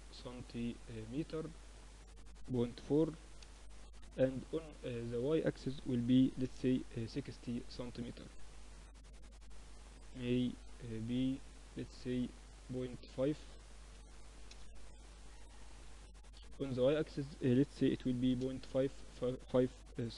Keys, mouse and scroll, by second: 1.2-3.1 drag, 3.7-5.5 drag, 8.9 middle click, 11.5-13.9 drag, 14.5-17.6 drag, 19.4 n.